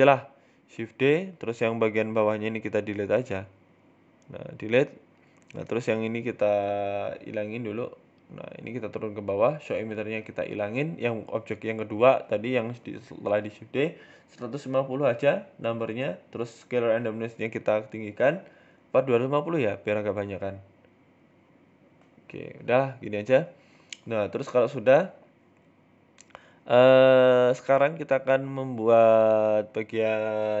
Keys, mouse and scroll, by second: 0.1 Tab, 0.3 middle click, 1.7 alt+h, 2.0 middle click, 2.9 KP_1, 3.6 click, 4.4 Delete, 5.1 middle click, 5.4 Tab, 5.5 middle click, 5.8 right click, 6.6 click, 7.0 right click, 7.2 middle click, 7.7 g, 9.8 click, 10.4 click, 12.0 click, 13.1-13.6 scroll up 2, 13.3 middle click, 14.6 click, 16.5 click, 17.5 click, 18.9 BackSpace, 19.8 middle click, 20.1 scroll down 1, 20.2 middle click, 20.5 Tab, 20.7 Tab, 20.9 middle click, 21.3-22.0 scroll up 3, 21.5 shift+middle click, 22.2 right click, 24.7 middle click, 27.6 right click, 28.6 KP_7, 30.2 middle click, 30.2 r.